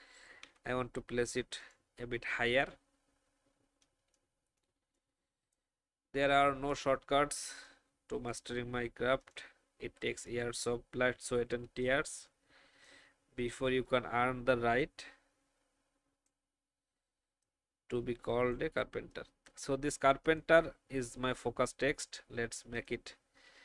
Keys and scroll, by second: 0.4 Up, 3.9 alt+space, 11.8 space.